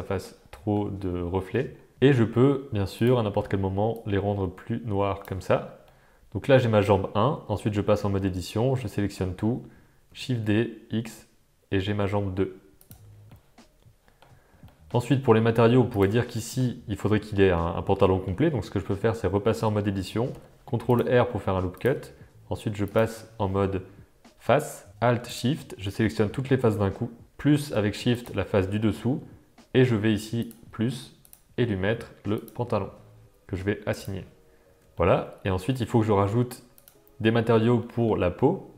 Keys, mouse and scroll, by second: 2.9 click, 5.8-6.9 middle drag, 7.6 Tab, 8.4 a, 8.7 a, 9.1 a, 10.1 shift+d, 13.0 Tab, 13.2-14.3 middle drag, 14.6 shift+middle drag, 15.0-15.3 middle drag, 16.3 middle click, 17.5-18.4 middle drag, 18.4 Tab, 20.3 ctrl+r, 22.9 click, 25.2 shift+click, 26.0 middle click, 30.4 click, 31.3-32.5 drag, 33.9 click, 34.6 Tab, 34.9 shift+middle drag, 35.7 middle drag, 37.5 Tab, 37.8 middle click.